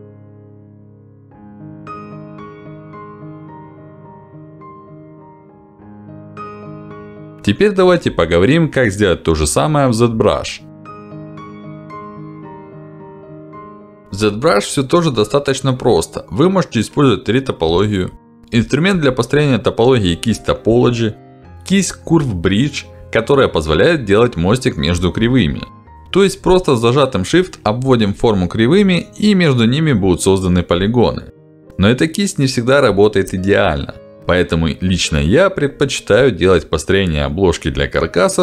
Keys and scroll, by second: 0.7 f, 4.0 f, 5.0 f, 9.9 f, 22.4 b.